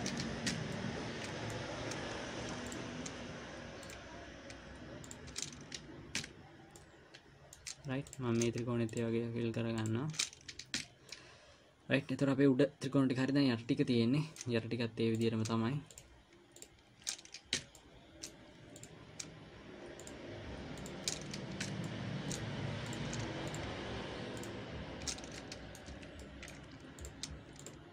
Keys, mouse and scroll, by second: 0.9 f, 1.0 middle click, 3.1 click, 4.3 shift+click, 6.6 f, 7.1 middle click, 8.5 click, 9.3 shift+click, 11.2 f, 11.6 middle click, 15.6 click, 16.3 shift+click, 17.9 f, 18.1 middle click, 19.1 click, 20.4 shift+click, 21.1 click, 22.1 f, 22.3 middle click, 23.3 click, 23.9 shift+click, 25.7 middle click, 26.3 f, 26.6 middle click, 27.3 click.